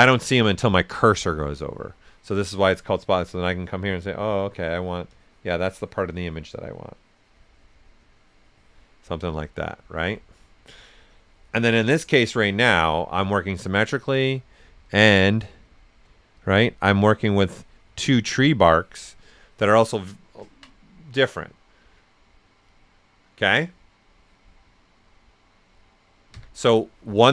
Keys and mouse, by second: 1.9-4.2 alt+right drag, 5.1-8.9 drag, 8.7 typing, 8.9 alt+right click, 9.3 right click, 10.5-13.0 drag, 13.0 right click, 15.5 typing, 16.3-18.6 drag, 18.6 alt+right click, 19.3 right click, 20.7 ctrl+right click, 26.3 ctrl+z.